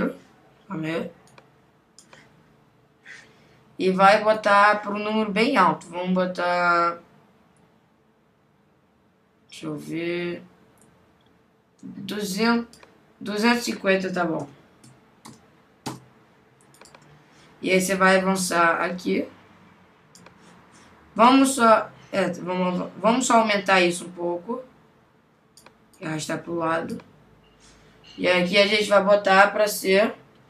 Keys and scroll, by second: 15.9 Return.